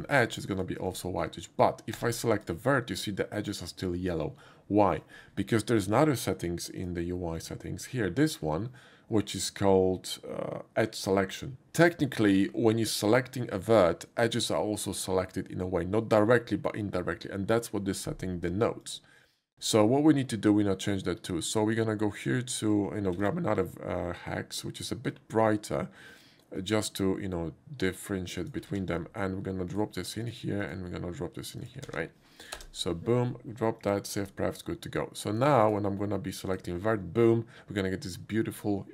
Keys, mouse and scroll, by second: 0.5 shift+click, 0.9 shift+click, 1.9 1, 2.4 click, 7.4 click, 12.3 click, 18.8 click, 19.3 click, 21.8 click, 23.2 ctrl+c, 26.6 click, 28.4 click, 28.9 ctrl+v, 29.8 click, 30.3 click, 30.6 click, 31.6 click, 31.9 ctrl+v, 32.6 Return, 33.8 click, 34.2 click, 35.4 click, 36.5 click.